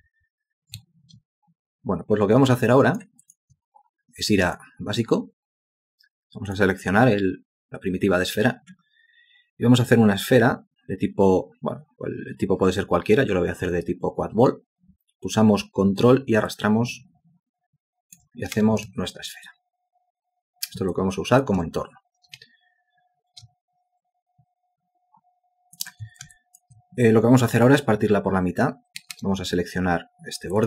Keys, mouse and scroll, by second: 0.8 ctrl+space, 2.6 alt+click, 3.2 alt+click, 3.4-4.5 alt+scroll down 1, 16.5 ctrl+click, 18.6 space, 19.5 alt+click, 20.9 alt+click, 22.4 ctrl+space, 26.3 alt+shift+click, 29.0 space.